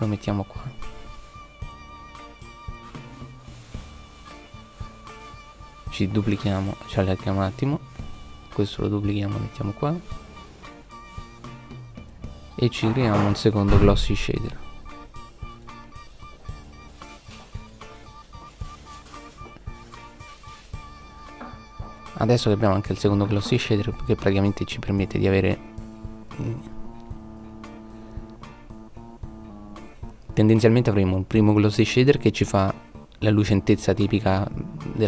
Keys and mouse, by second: 8.2 shift+d, 12.5 shift+d, 18.6 middle click, 20.5 right click, 21.4-21.9 drag, 21.9 middle click, 22.2 middle click, 27.1 middle click.